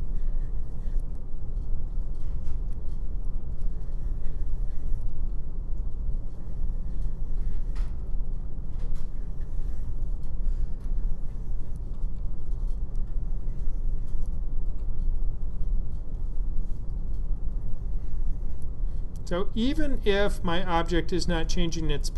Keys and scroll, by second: 1.0 F7, 5.0 F7, 8.0 F7, 10.1 F7, 11.9 F7, 14.4 F7, 19.5 F7.